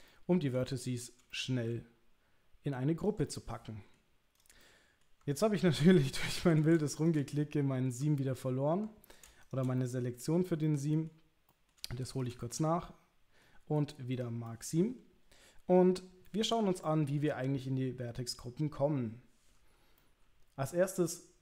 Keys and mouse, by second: 0.1 shift+middle click, 0.6 middle click, 1.3 shift+middle click, 3.3 middle click, 4.6 middle click, 5.9 middle click, 7.3 middle click, 9.8 middle click, 10.6 middle click, 11.5 middle click, 12.4-13.4 middle drag, 14.5-15.8 middle drag, 16.3 middle click, 16.7 shift+middle click, 20.0 middle click.